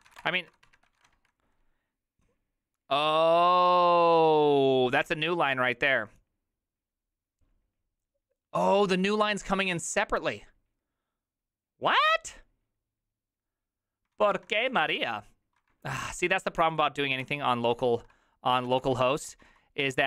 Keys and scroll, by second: 0.0-1.6 typing, 14.3 ctrl+a, 14.3 1, 14.7 ctrl+c, 14.8 ctrl+:, 15.0 Return, 15.0 w, 15.7 ctrl+^, 16.0 ctrl+^, 16.6 ctrl+t, 17.2 ctrl+n, 17.7 ctrl+s, 18.5-20.0 typing.